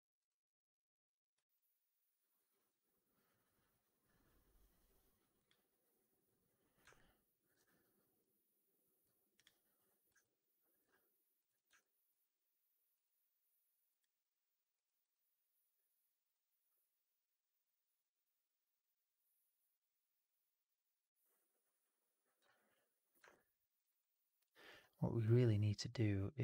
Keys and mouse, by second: 0.1 click, 1.4-7.4 alt+drag, 10.1-10.7 alt+drag, 11.7 alt+drag, 23.2 alt+click, 23.8 alt+right click, 24.0 alt+click.